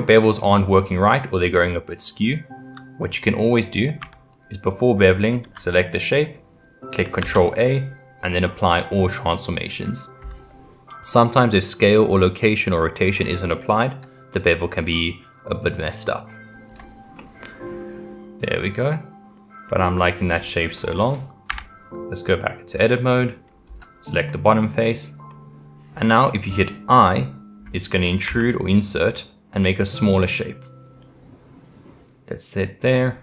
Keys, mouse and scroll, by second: 4.0 Tab, 5.7-7.2 middle drag, 7.2 ctrl+a, 16.7 click, 17.2-20.2 middle drag, 20.2 click, 20.8-21.5 middle drag, 21.5 Tab, 22.7 click, 23.2 middle click, 23.6 click, 24.3-28.3 middle drag.